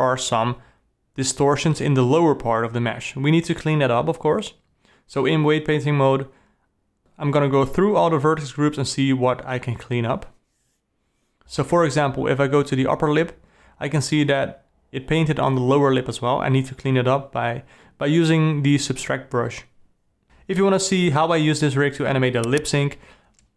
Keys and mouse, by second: 0.6 click, 1.5 click, 1.7 click, 2.0 click, 2.4 click, 2.6 d, 2.8 d, 3.2 click, 3.8 click, 4.2 click, 4.5 click, 4.7 click, 5.2 click, 5.6 click, 6.0 ctrl+z, 6.1 ctrl+z, 6.4 click, 6.7 click, 7.4 ctrl+z, 8.1 click, 9.0-11.4 drag, 11.4 d, 12.7 d, 20.0 shift+click, 20.8 g.